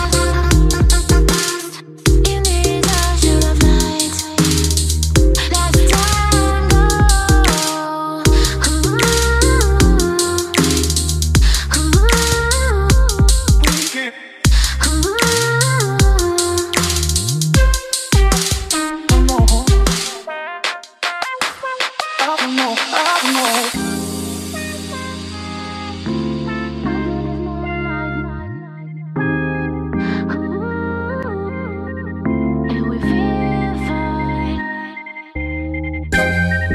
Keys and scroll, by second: 7.1-8.5 typing, 12.7-13.4 typing, 21.5-22.7 typing, 23.8 ctrl+a, 29.0-30.0 typing, 30.7 ctrl+a, 35.9-36.5 typing.